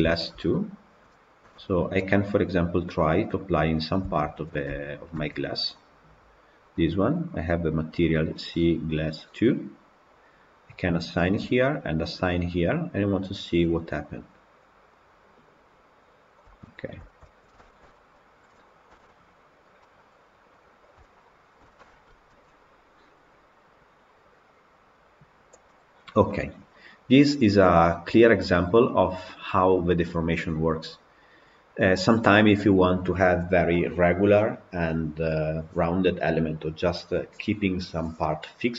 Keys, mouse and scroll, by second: 0.7 click, 1.4 KP_Decimal, 2.0-3.3 middle drag, 3.3-5.2 scroll up 1, 5.2 Tab, 5.8 click, 7.2 click, 11.1 click, 12.1 click, 13.1 click, 14.1 click, 16.5 click, 17.0 Tab, 17.3 scroll down 2, 17.5-18.2 shift+middle drag, 18.2 click, 18.8 KP_Decimal, 19.5 scroll up 1, 19.7-24.9 middle drag, 24.9 click, 25.6-28.6 middle drag, 28.6 scroll up 1, 29.2-30.2 middle drag, 30.2-33.2 scroll up 1.